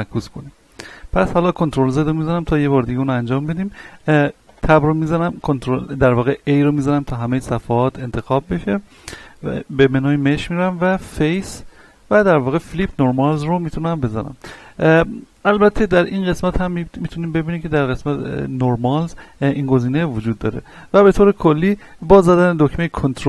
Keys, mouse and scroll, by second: 0.4 Tab, 1.2 ctrl+z, 1.8 scroll up 1, 2.7-4.5 middle drag, 4.5 Tab, 4.9 middle click, 5.4 a, 6.9-9.8 middle drag, 9.8 click, 22.0-23.2 middle drag.